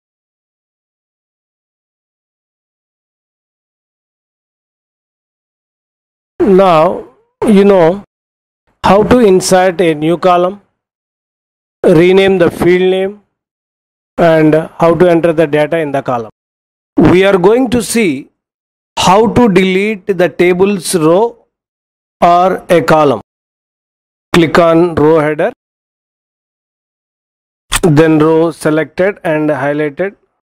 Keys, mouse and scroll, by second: 3.8 Return, 27.7 drag.